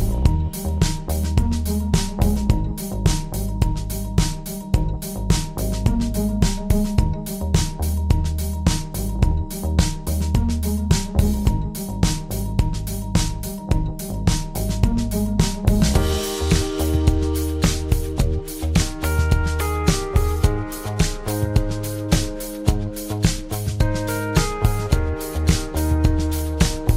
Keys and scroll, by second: 2.1 F8.